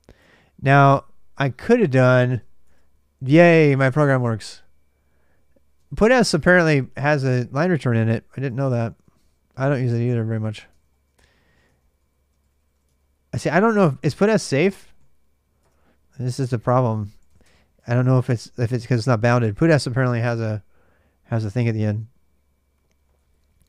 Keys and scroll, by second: 0.0-2.1 typing, 2.1 Tab, 2.5 Return, 5.6 ctrl+[, 5.7-6.4 typing, 7.9-13.9 typing, 10.5 ctrl+[, 10.6 ctrl+j, 11.5 ctrl+[, 15.4 Return, 16.5-17.6 typing, 20.9-23.6 typing.